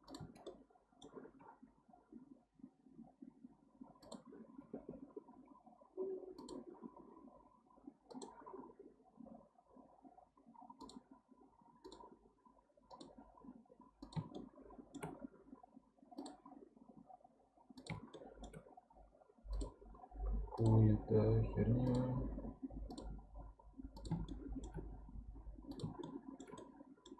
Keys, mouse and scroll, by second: 0.5 middle click, 1.4 k, 14.4-17.4 shift+middle drag, 18.1-21.2 shift+middle drag, 24.3-27.1 shift+middle drag.